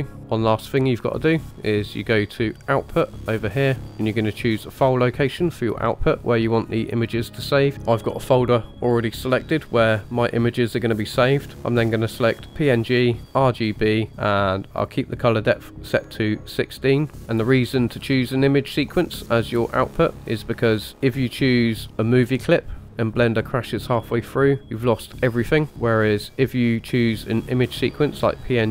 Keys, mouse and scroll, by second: 0.2 shift+middle click, 0.2 scroll up 2, 2.5 click, 13.2 click, 16.7-17.2 scroll down 2, 20.9-22.8 drag, 25.9-28.7 drag.